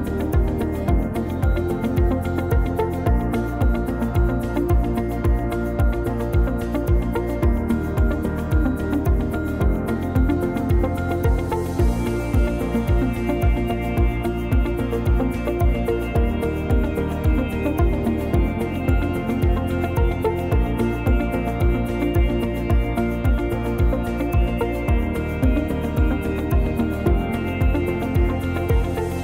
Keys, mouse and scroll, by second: 0.5 click, 0.5-0.8 scroll down 2, 1.0 shift+middle click, 1.2 scroll up 2, 1.6 shift+middle click, 2.0-2.4 scroll up 1, 7.2-9.1 scroll down 2, 7.4 middle click, 9.1 middle click, 11.7 click, 13.0 click, 13.6 scroll up 1, 13.9 shift+middle click, 14.0 click, 14.6 Tab, 15.1 Tab, 15.4 right click, 17.1 click, 17.4 click, 17.9 click, 18.3 click, 18.6 Tab, 18.9 middle click, 19.6 Tab, 20.0 Tab, 21.6 click, 22.3 click, 23.1 middle click, 24.9 p, 26.5 Tab, 26.8 click, 27.1 click, 27.7 right click.